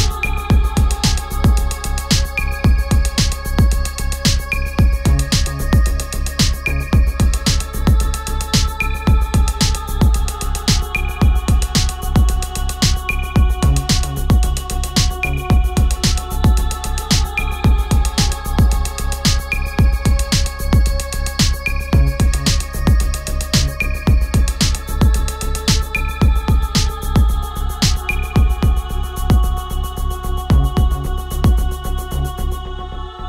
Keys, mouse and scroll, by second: 2.1-12.0 ctrl+drag, 9.7 typing, 12.0-19.5 ctrl+drag, 20.8 Return, 22.0 click, 24.1 click, 24.5 ctrl+click, 31.6 click.